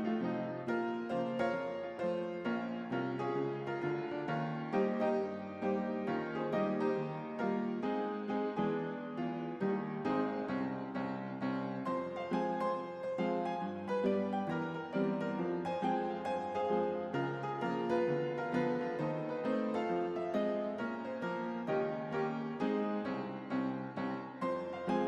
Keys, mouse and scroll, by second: 4.9-7.8 drag, 10.4 click, 13.3-16.0 typing, 16.6 Return, 17.9 click, 18.8 p, 20.5-22.5 drag.